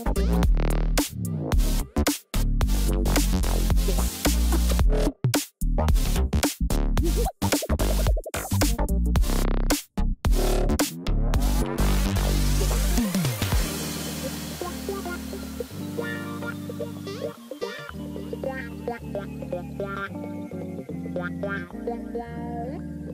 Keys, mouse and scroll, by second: 4.6 ctrl+=, 5.9 ctrl+=, 19.1 ctrl+j, 20.1 ctrl+t, 21.6 alt+click.